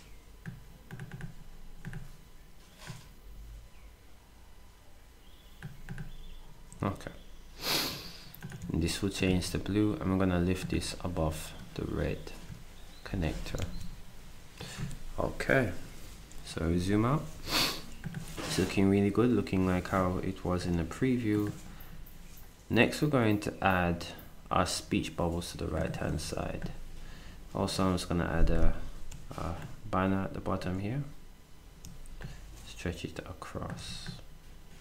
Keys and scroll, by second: 8.6 ctrl+d, 9.3 s, 26.2 ctrl+d.